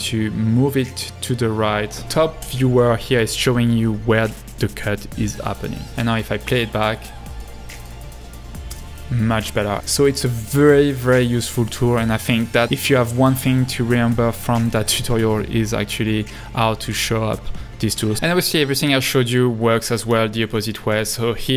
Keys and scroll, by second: 6.0 space.